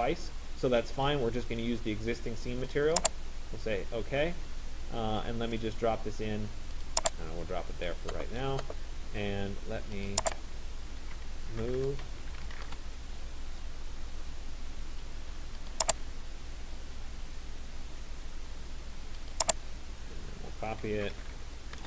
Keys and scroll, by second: 11.4 BackSpace, 12.9 Return, 21.6 Return.